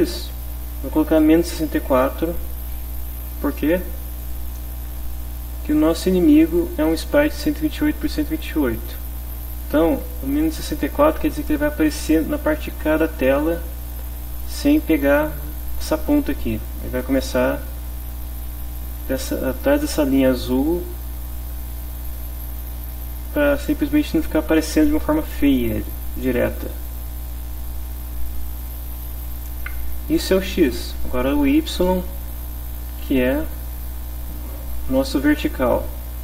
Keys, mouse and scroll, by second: 0.1 Left, 0.8 -, 1.6 6, 1.8 4, 3.0 click, 4.2 click, 5.7 click, 27.1 click, 28.5 click, 30.2 click, 31.0 click.